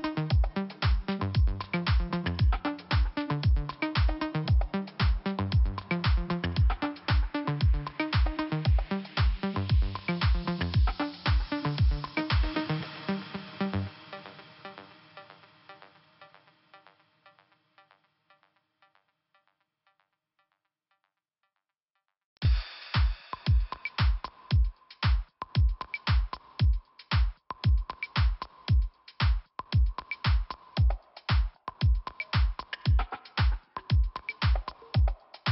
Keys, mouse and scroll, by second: 0.8 click, 2.0 click, 3.7 click, 5.9 scroll up 1, 6.4 click, 7.4 click, 8.7 click, 9.8 click, 11.2 scroll down 2, 13.9 click, 14.0 click, 14.9 click, 16.4 click, 17.4 p, 18.4-18.7 scroll down 2, 19.7 click, 23.7 click, 25.5 click, 28.3 click, 31.0 scroll up 2, 31.8 click, 32.9 click.